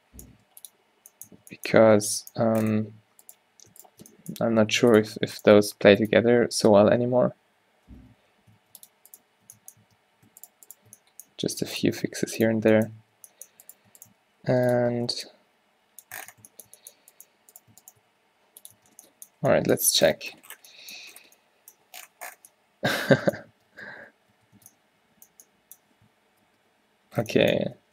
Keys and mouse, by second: 0.4 g, 1.6 Tab, 3.3 Tab, 4.5 g, 5.7 g, 7.9 ctrl+z, 8.2 ctrl+z, 8.6 ctrl+r, 9.6 Tab, 9.9 Tab, 11.4 g, 12.8 Tab, 13.1 Tab, 14.5 g, 14.9 Tab, 16.9 Tab, 18.1 g, 18.8 Tab, 23.7 Tab, 23.8 a, 24.0 a, 24.4 q, 24.6 Tab, 26.7 ctrl+z, 27.7 Tab.